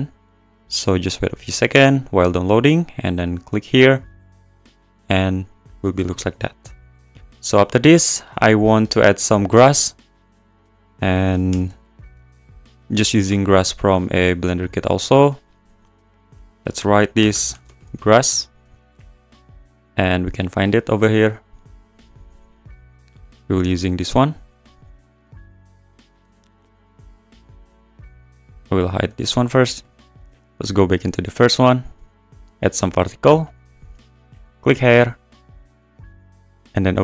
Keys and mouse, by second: 3.2 click, 4.2 click, 6.2 click, 6.7 click, 7.6 click, 8.4 click, 9.7 shift+a, 11.5 g, 11.6 x, 12.3 `, 13.3 s, 13.6 click, 15.2 click, 15.7 click, 16.4-18.0 drag, 17.7 s, 20.4 click, 21.0 click, 22.0 click, 23.4 click, 27.1 x, 27.9 x, 29.0 x, 30.1 click, 30.9 click, 32.3 click, 33.4 click, 34.4 click.